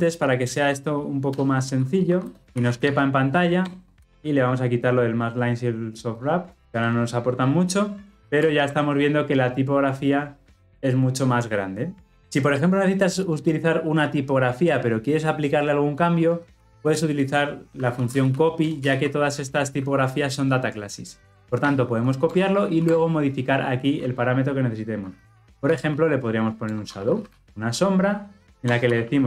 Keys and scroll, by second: 21.5 Return, 22.5 ctrl+p, 28.5 alt+Return.